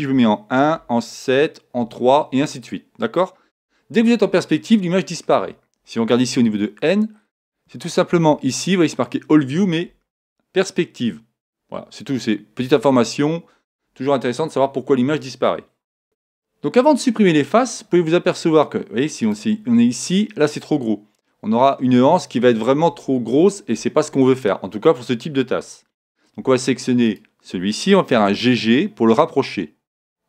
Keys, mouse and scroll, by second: 0.1 KP_1, 0.7 KP_7, 1.7 KP_3, 2.3 KP_3, 4.6-9.9 middle drag, 6.3 n, 7.3-7.9 scroll down 1, 9.2-9.7 scroll up 1, 16.0 a, 19.2-21.2 right drag, 27.0-28.9 right drag, 28.1 g.